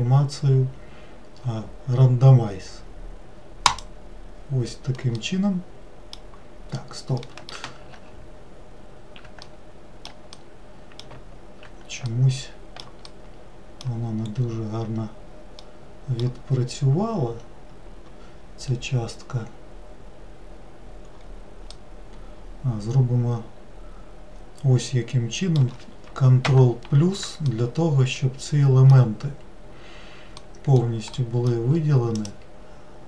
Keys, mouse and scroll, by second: 5.2-8.0 middle drag, 8.0 ctrl+z, 9.5-12.2 middle drag, 13.1-14.2 middle drag, 14.2-14.9 scroll up 1, 14.9-15.6 scroll up 1, 15.6 middle click, 16.5-19.6 scroll down 1, 21.7-24.8 middle drag, 26.4 ctrl+KP_Add, 27.5-32.2 middle drag, 32.2-33.0 drag.